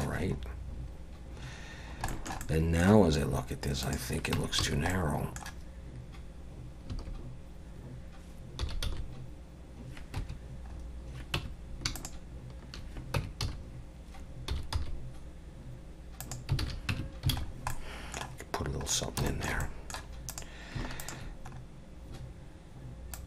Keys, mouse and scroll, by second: 0.2 scroll up 2, 0.8 scroll up 1, 1.8 scroll down 1, 2.1 shift+middle click, 2.4 middle click, 3.8 click, 4.4 Tab, 4.6 a, 4.9 middle click, 6.9 a, 8.6 s, 10.7 scroll up 2, 11.4 Tab, 12.0 shift+click, 13.2 Tab, 13.4 a, 14.5 s, 16.6 alt+a, 16.9 Tab, 17.3 alt+a, 17.4 scroll down 3, 17.7 middle click, 18.9 scroll down 2, 19.3 shift+middle click, 19.6 middle click, 20.3 click, 21.0 shift+click, 21.5-22.1 scroll up 2, 23.1 click.